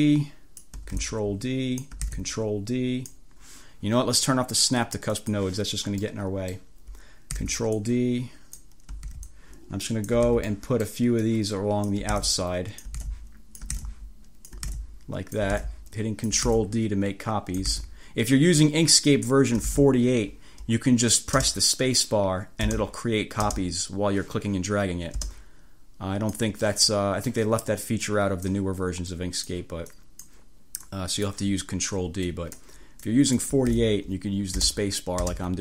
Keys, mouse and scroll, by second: 0.1 ctrl+click, 1.1 ctrl+d, 1.1-2.1 ctrl+drag, 2.1 ctrl+d, 2.2-3.3 ctrl+drag, 5.1 click, 6.1 click, 7.5 ctrl+d, 9.2 ctrl+d, 10.4 ctrl+d, 12.3 ctrl+d, 13.1 ctrl+d, 13.9 ctrl+d, 14.8 ctrl+d, 15.6 d, 16.6 ctrl+d, 17.8 ctrl+d, 19.7 ctrl+d, 21.4 space, 22.7 space, 23.5 space, 25.3 space, 27.3 click, 28.1 click, 29.2 click, 30.0 click, 30.9 click, 32.4 click, 33.1 click, 33.8 ctrl+d, 33.9 ctrl+click, 34.7 space.